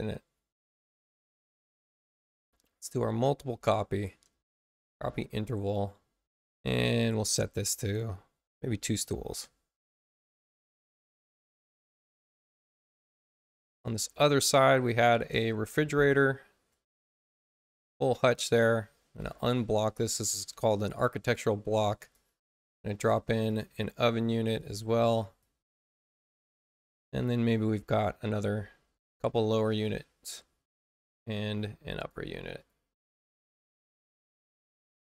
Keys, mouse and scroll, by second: 1.4 click, 4.9 ctrl+k, 6.6 click, 8.9 2, 9.2 Return, 10.3-11.4 drag, 13.9 click, 15.0 click, 17.3 click, 19.1 click, 21.9 click, 23.4 click, 24.1 space, 24.5 click, 25.3 click, 28.2 click, 29.6 click, 31.2 shift+b, 31.9 click, 32.5 click, 33.3-35.0 drag.